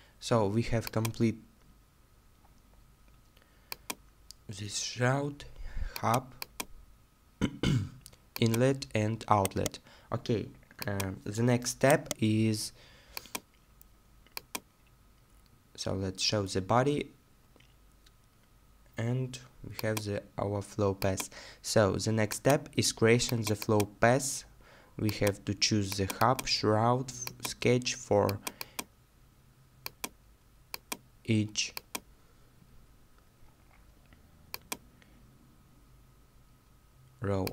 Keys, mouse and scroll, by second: 6.9 middle click, 9.4 right click, 11.9 right click, 14.9 middle click, 32.6 middle click.